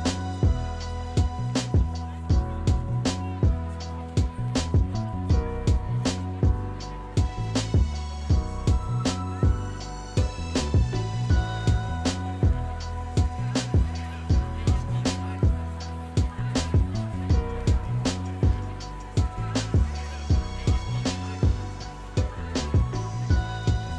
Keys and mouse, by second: 3.3-4.5 middle drag, 5.5 click, 9.7 s, 10.5 click, 11.0 g, 11.2 x, 13.7 click, 15.0 shift+d, 15.3 x, 20.2 click, 22.7 click, 23.9 g.